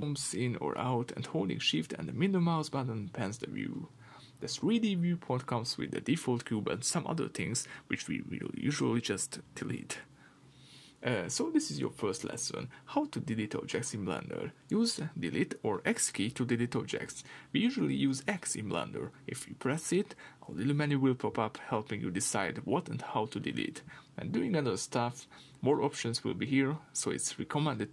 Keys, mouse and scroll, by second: 0.2-0.7 scroll down 2, 0.7-1.1 scroll up 2, 1.1-1.6 scroll down 1, 1.6 shift+middle click, 2.9-13.9 middle drag, 4.5 scroll up 2, 5.6-9.6 scroll down 2, 11.4-13.9 scroll down 2, 13.9 click, 15.7 x.